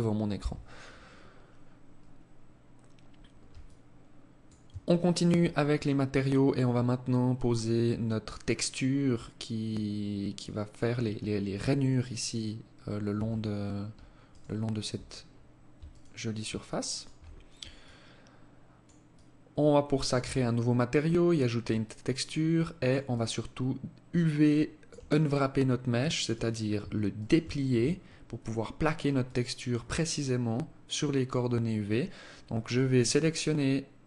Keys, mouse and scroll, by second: 0.2 scroll down 1, 0.4 scroll up 1, 0.6 scroll down 1, 2.7 alt+click, 3.9 alt+shift+click, 12.2 Tab, 13.4 alt+right click, 15.0 alt+right click, 16.0 alt+shift+right click, 17.0 alt+click, 18.2 alt+click, 19.5-19.9 scroll down 5, 20.2-20.6 scroll up 5, 21.0 alt+click, 22.2 alt+click, 25.4 right click, 26.3 shift+right click, 28.4 alt+click.